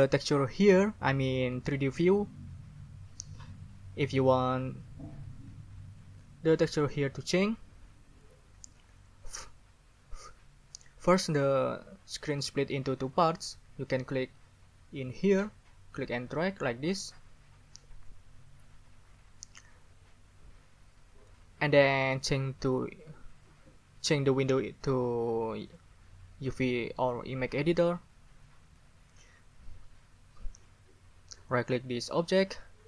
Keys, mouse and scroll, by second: 16.2 scroll up 2, 16.4 click, 16.4 middle click, 16.6 click, 17.0 scroll up 2, 25.7 scroll up 2, 27.7 middle click, 27.8 click, 32.2 right click.